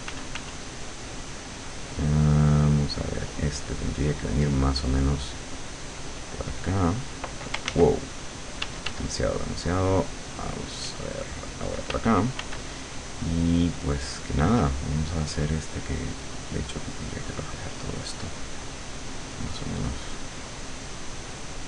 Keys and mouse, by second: 0.1 f, 5.9-7.3 drag, 7.8 ctrl+z, 8.7 d, 9.5-12.0 drag, 11.9 f, 16.0-19.3 drag, 19.6-21.6 drag.